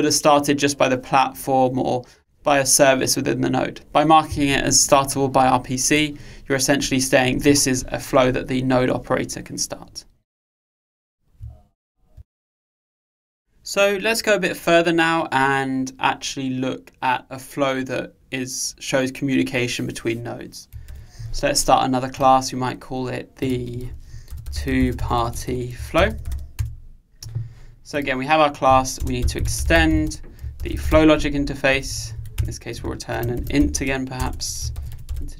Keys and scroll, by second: 21.0 super+1, 32.5 Return.